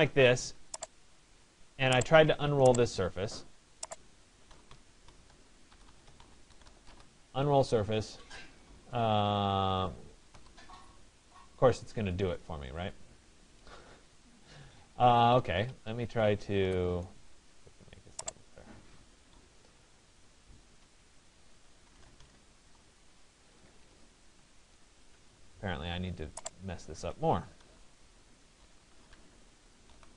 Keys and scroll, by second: 0.8 Escape, 5.3 BackSpace, 14.1 Escape, 20.2 Escape.